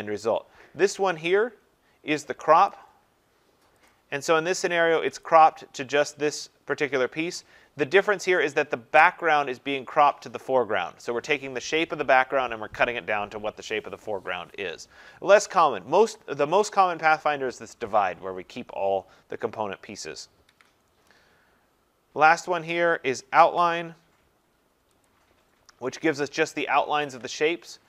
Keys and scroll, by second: 20.4 ctrl+z.